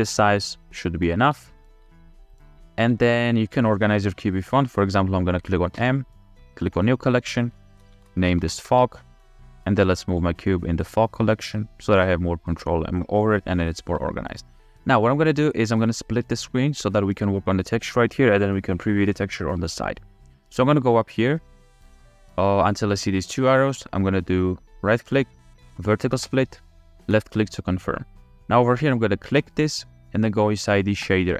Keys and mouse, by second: 1.7 g, 2.3-2.8 drag, 2.8 s, 4.1 g, 4.4-4.8 drag, 5.8 m, 13.9 g, 25.0-31.1 drag.